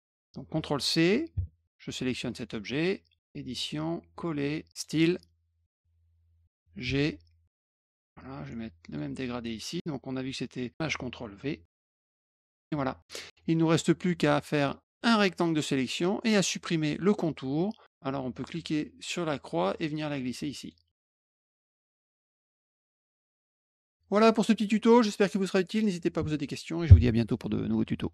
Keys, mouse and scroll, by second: 2.2 alt+click, 4.7 click, 6.8 g, 7.7 click, 8.8 click, 11.9 click, 12.2 click, 12.5 click, 13.7 alt+click, 14.6 alt+click, 19.3-20.6 drag, 21.6 click, 21.7 middle click, 21.9 middle click, 22.0 middle click, 22.2 click, 22.3 middle click, 22.7-23.5 typing, 23.4 click, 24.1 middle click.